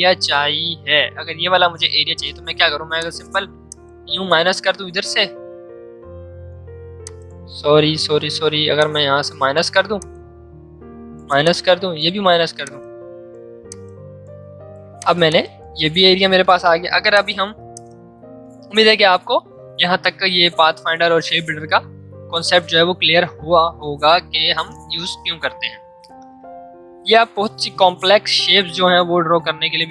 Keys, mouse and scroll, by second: 2.9 click, 3.7-6.4 super+drag, 7.0 click, 7.0 click, 8.1 ctrl+z, 8.7-14.6 alt+drag, 14.6 v, 14.9 click, 16.9 space, 17.1 click, 18.2 space, 26.9 m.